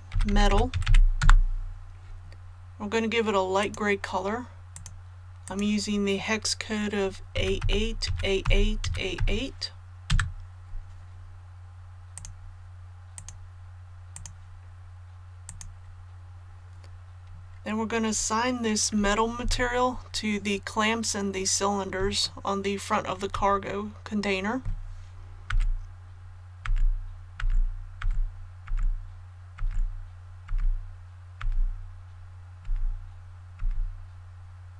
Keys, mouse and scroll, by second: 0.1-0.8 typing, 1.1 Return, 3.5 click, 7.3 a, 7.5 KP_8, 8.0 a, 8.8 a, 12.1 click, 19.4 KP_1, 20.9 scroll up 1, 22.2 shift+middle click, 26.6-33.5 typing.